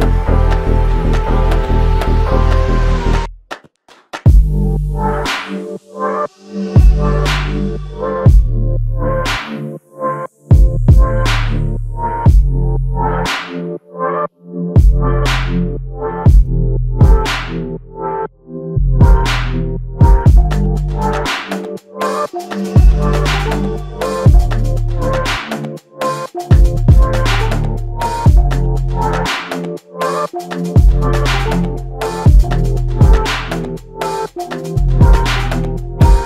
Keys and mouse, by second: 0.7 f, 2.0 double click, 2.9 alt+click, 4.7 double click, 6.5 alt+click, 8.1 double click, 8.5 alt+click, 9.7 double click, 10.8 alt+click, 12.7 ctrl+alt+click, 13.7 alt+shift+click, 14.2 alt+click, 21.6 f, 29.3 double click, 31.1 ctrl+alt+click.